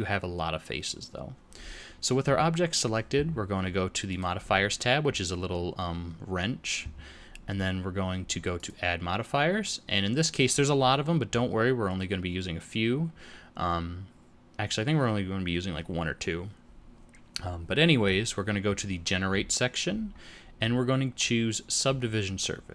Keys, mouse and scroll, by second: 4.0 click, 8.5 click.